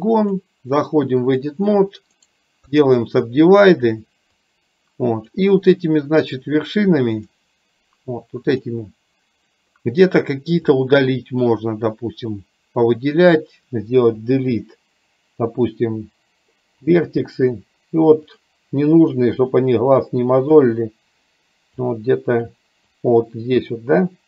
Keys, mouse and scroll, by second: 0.4-1.6 drag, 2.5 right click, 4.4-5.4 drag, 8.6 click, 10.8 click, 14.1 Delete, 18.9 Delete, 20.5 click, 22.0 click, 23.1-24.1 drag.